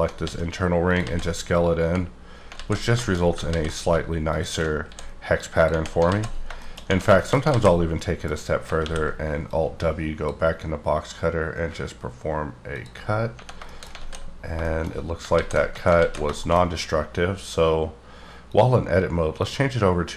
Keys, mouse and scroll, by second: 0.3 s, 0.9 click, 1.0 alt+z, 1.3-2.2 scroll down 7, 2.2 scroll up 3, 2.5 z, 3.0 shift+middle click, 3.3 scroll up 1, 3.4 ctrl+z, 4.2 alt+shift+click, 4.8 s, 5.5 click, 6.1 alt+z, 6.4 shift+scroll down 2, 6.5 shift+middle click, 6.8-7.5 scroll up 3, 7.1 shift+middle click, 7.5 alt+z, 7.9 middle click, 8.7 alt+w, 9.4 click, 12.7 click, 13.2 scroll down 2, 13.7 shift+middle click, 14.0 alt+z, 14.3 scroll down 3, 14.6 shift+middle click, 14.9 scroll up 3, 15.3 ctrl+z, 15.9 ctrl+z, 16.0 ctrl+z, 16.4 shift+middle click, 16.6-18.4 scroll up 3, 18.4 click, 19.3 click, 19.8-20.1 scroll up 2.